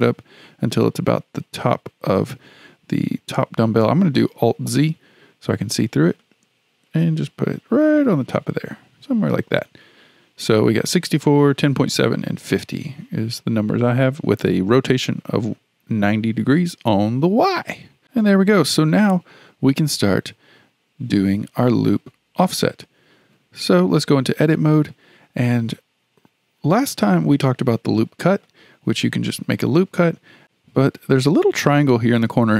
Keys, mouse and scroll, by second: 4.6 alt+z, 6.2-9.2 drag, 17.3-18.0 scroll down 4, 19.8-20.4 scroll up 1, 20.4-22.8 scroll up 1, 23.2 Tab, 26.8-29.9 drag, 30.4-32.5 drag.